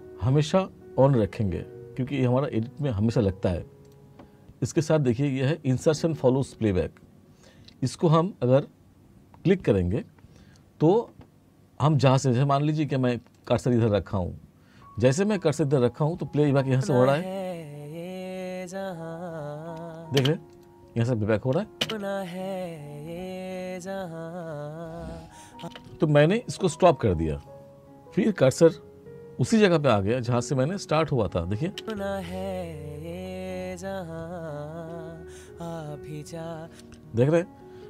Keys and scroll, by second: 16.7 space, 20.2 space, 21.9 space, 25.6 space, 31.8 space, 36.7 space.